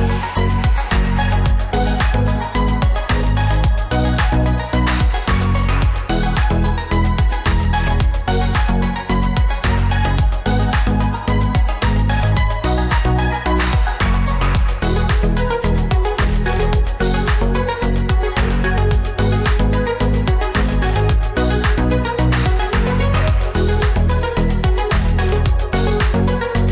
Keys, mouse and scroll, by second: 0.0-3.4 typing, 6.7 ctrl+t.